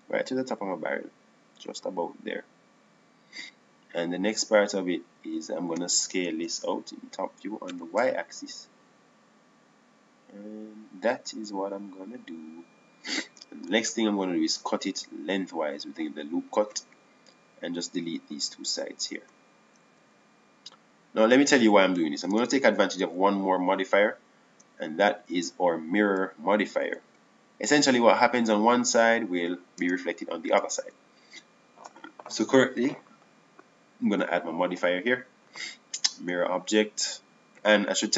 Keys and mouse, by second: 8.3 KP_7, 9.4 s, 16.5 ctrl+r, 21.7 Delete, 24.2 Tab, 26.7 Tab, 29.5 middle click, 30.3 click, 31.6 Tab, 32.3 Tab, 33.3 Tab.